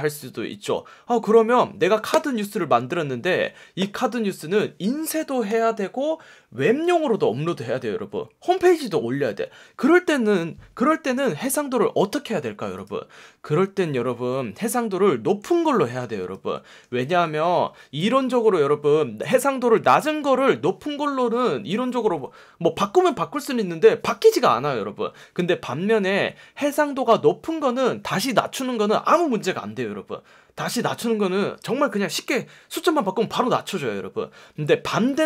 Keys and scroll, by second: 15.5 F1, 16.3 F1.